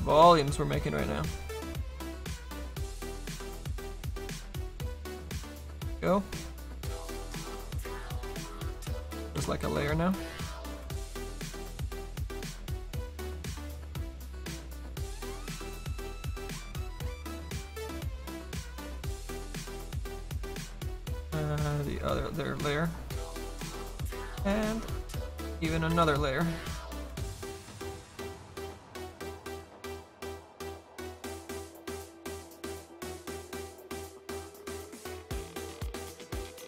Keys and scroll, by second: 1.3 s, 1.9 s, 8.9 ctrl+z, 12.2 s.